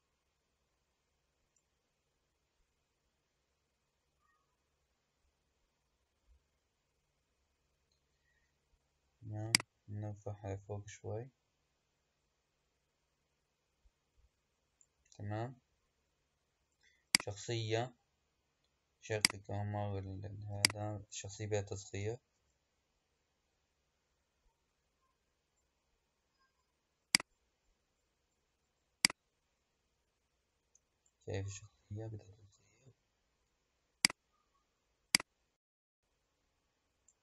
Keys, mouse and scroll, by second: 9.3-12.4 drag, 17.0 click, 19.0 click, 20.4 click, 22.2 s, 27.4-28.7 scroll down 6, 28.7 scroll down 1, 28.9 click, 31.6 s, 35.0 click.